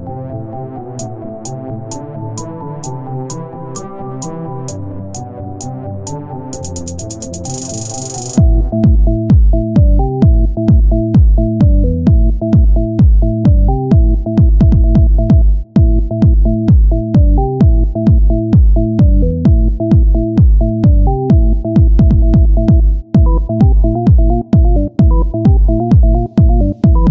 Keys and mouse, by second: 6.9-8.1 drag, 8.5 KP_1, 9.5 shift+a, 11.7-13.7 drag, 13.7 s, 15.5 KP_1, 16.1 shift+d, 17.7 s, 19.3-27.1 drag.